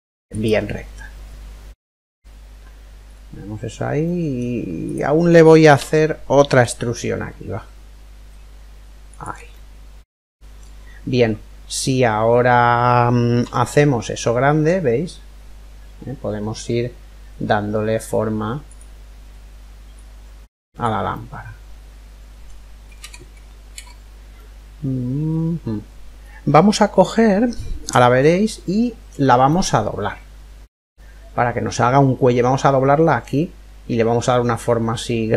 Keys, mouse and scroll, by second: 2.7-5.5 middle drag, 4.5-6.2 right drag, 5.5 e, 9.1-11.0 middle drag, 13.0 s, 19.6 click, 20.7-22.5 middle drag, 24.0-26.0 ctrl+middle drag, 27.5-31.0 middle drag, 33.9-35.3 middle drag.